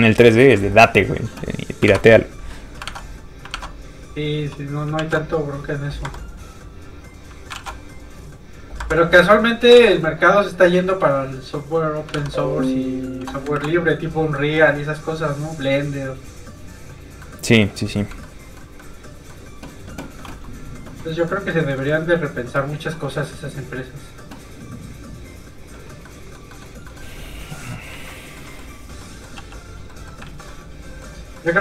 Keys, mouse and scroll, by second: 1.9 alt+Tab, 2.9 alt+Tab, 3.6 alt+Tab, 5.0 shift+super+s, 6.1 shift+s, 7.6 shift+super+s, 8.8 Escape, 9.8 shift+super+s, 11.3 shift+click, 11.4 click, 12.2 alt+Tab, 13.1 alt+click, 13.5 ctrl+alt+v, 14.0 click, 14.1 click, 14.3 middle click, 14.7 click, 15.9-16.4 scroll down 1, 16.4 click, 17.0 scroll down 1, 17.2 middle click, 17.9 scroll up 1, 18.2 middle click, 21.3 middle click, 21.6 shift+middle click, 21.8 middle click, 25.3 click, 26.0 middle click, 26.8 shift+middle click, 28.1 shift+middle click, 28.5 middle click, 29.0 middle click, 29.4 f, 29.6 click, 29.9 middle click, 30.2 alt+shift+z, 30.6 middle click.